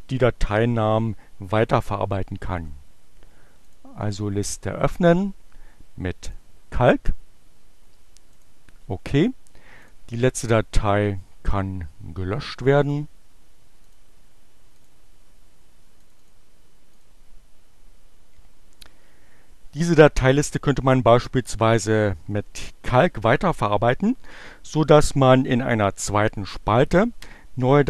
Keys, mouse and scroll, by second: 2.6 click, 3.7 click, 4.1 right click, 5.2-6.6 drag, 8.4 click, 9.8 click, 10.3 Delete, 12.9 click, 13.9 click, 14.8 click, 16.0 click, 17.0 click.